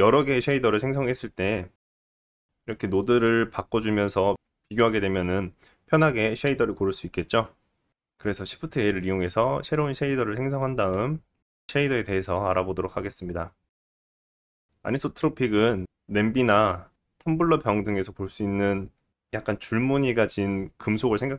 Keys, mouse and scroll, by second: 3.5 scroll up 2, 7.9 click, 8.5-9.0 scroll up 1, 9.0 middle click, 10.0-10.6 scroll down 2, 10.1-12.6 drag, 12.5 scroll up 2, 13.0 right click, 13.0 middle click, 13.6 scroll up 2.